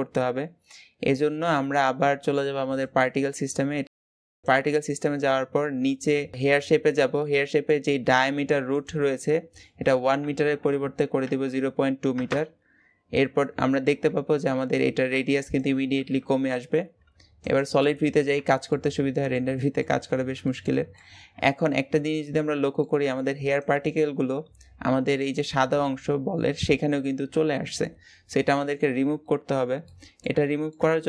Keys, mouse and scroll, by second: 0.6-2.5 scroll down 2, 2.5 click, 4.7-7.7 scroll down 14, 8.5-11.7 drag, 17.3 click, 17.9-18.3 scroll down 3, 18.3-19.9 shift+middle drag, 19.9-20.2 scroll up 1, 20.2-20.7 shift+middle drag, 20.7 scroll up 1, 20.7-28.9 middle drag, 28.9-29.6 scroll down 4, 29.6-31.0 middle drag.